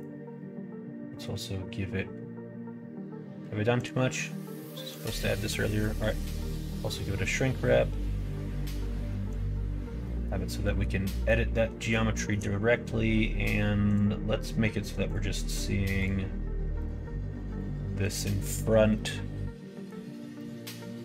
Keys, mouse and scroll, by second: 6.3 middle click, 9.2 click, 10.0 middle click, 10.6 middle click, 11.1 middle click, 12.1 shift+middle click, 13.8 click, 15.0 click, 15.9 click, 18.0 click, 19.0 middle click, 20.4 middle click.